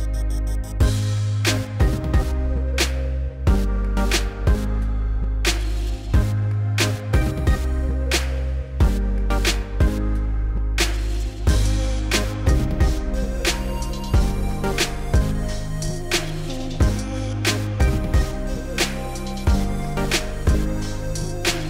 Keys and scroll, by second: 2.6 s, 5.6 s, 8.5 s, 17.0 3, 18.5 s, 19.4 s.